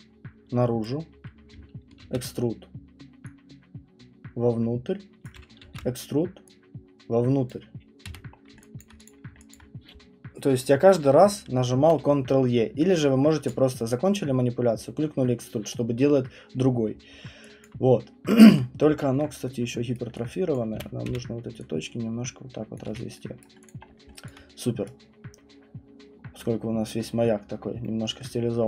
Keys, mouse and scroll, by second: 0.8 click, 2.0 ctrl+e, 5.2 click, 5.6 ctrl+e, 7.5 click, 8.0 w, 8.3 middle click, 8.5 middle click, 8.8 alt+right click, 9.0 click, 9.5 alt+click, 17.6 alt+click, 17.9 middle click, 18.0 middle click, 19.1 alt+middle click, 19.9 right click, 20.5 click, 20.7-21.1 typing, 22.8 click, 22.8-23.9 typing, 23.4 right click, 23.6 click, 23.8 middle click, 24.0 middle click, 24.2 alt+click, 24.8 right click, 25.1 middle click, 25.2 middle click, 25.3 middle click, 25.4 middle click, 26.2 middle click, 26.4-27.4 scroll, 27.8 middle click, 28.0 alt+middle click.